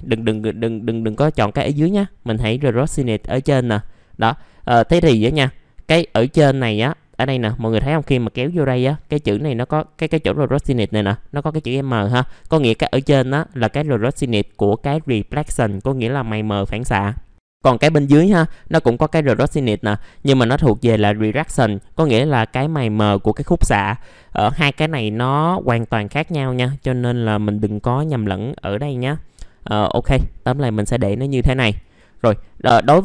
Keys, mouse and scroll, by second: 0.3 Delete, 0.3 click, 2.6-33.0 drag.